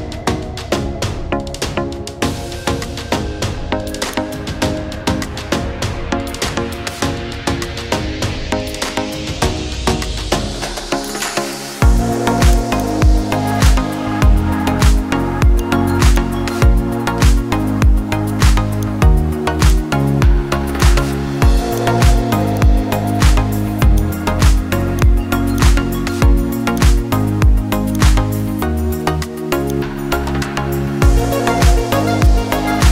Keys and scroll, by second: 2.2 ctrl+z, 16.8 Down, 17.3 Down, 17.6 Down.